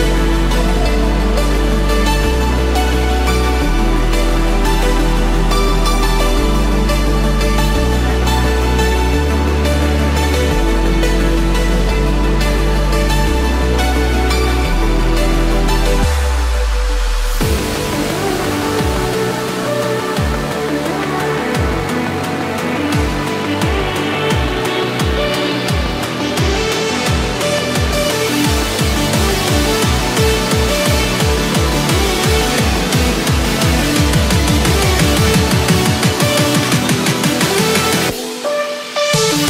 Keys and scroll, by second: 4.1 ctrl+d, 5.2 ctrl+0, 7.5 ctrl+z, 13.8 ctrl+=, 17.3 ctrl+z, 23.9 ctrl+-, 25.3 ctrl+=, 33.3 ctrl+-, 36.8 ctrl+=.